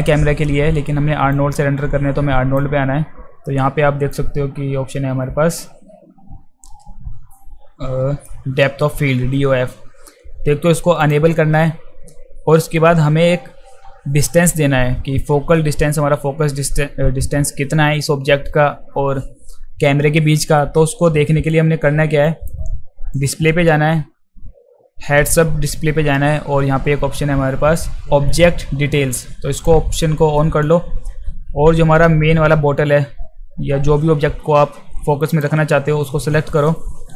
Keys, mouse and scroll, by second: 1.4-2.6 drag, 4.1-8.3 drag, 11.0 click, 22.2 drag, 23.1 click, 29.5 click, 35.3 click.